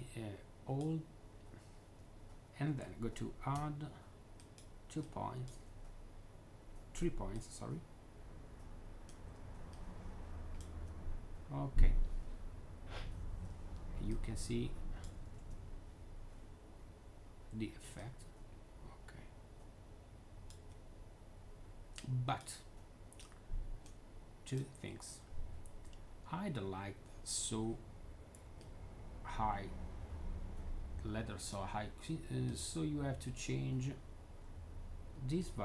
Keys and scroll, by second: 13.9-14.8 w, 15.2 z, 17.7-20.5 typing, 22.3 3.